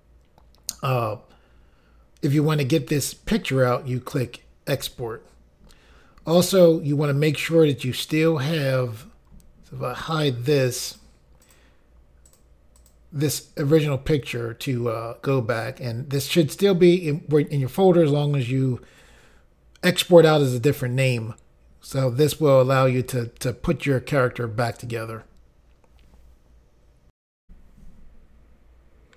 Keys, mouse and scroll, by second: 10.2 click, 11.0 click, 11.6 click, 12.4 click, 12.9 click, 27.4 Insert.